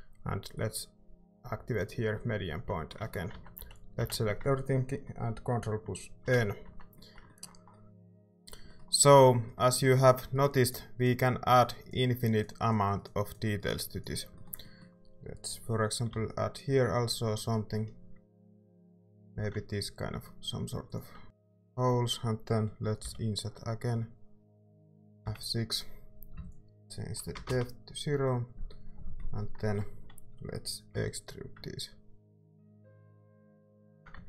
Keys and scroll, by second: 2.6 Tab, 3.3 Tab, 3.6 a, 6.2 ctrl+n, 6.6 Tab, 8.1 a, 16.1 i, 19.3 e, 21.2 Tab, 23.0 i, 25.2 F6, 27.3 0, 27.4 Return, 30.9 e, 34.1 Tab.